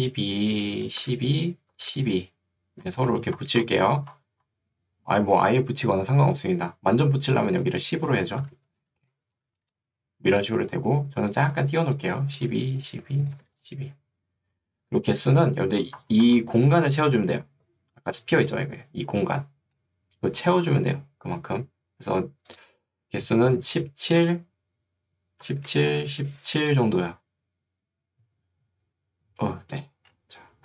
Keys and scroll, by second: 8.5-10.1 typing, 11.6 1, 12.6 2, 17.6 ctrl+2, 20.8 Escape, 24.2 Tab, 25.3-26.7 typing.